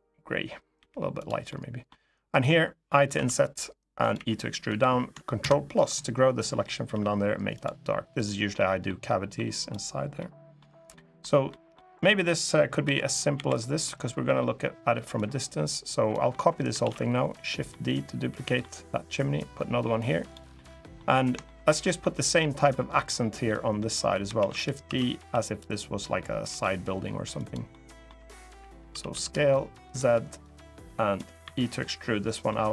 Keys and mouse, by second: 0.5 g, 0.9 click, 1.2 middle click, 2.1 click, 2.9 i, 3.7 click, 3.9 e, 4.4 click, 5.1 ctrl+KP_Add, 6.6 g, 7.3 click, 8.3 middle click, 8.8 middle click, 9.9 middle click, 10.7 middle click, 11.2 middle click, 12.6 l, 13.1 l, 13.6 click, 16.0 click, 16.5 shift+d, 17.1 click, 17.4 middle click, 18.9-20.1 drag, 20.3 middle click, 21.2 shift+middle click, 21.5 middle click, 22.1 middle click, 23.2 middle click, 24.1 shift+d, 24.6 s, 25.0 x, 26.2 y, 27.1 click, 27.4 click, 28.6 s, 28.9 z, 29.6 click, 30.1 click, 31.2 e, 32.0 click, 32.2 middle click.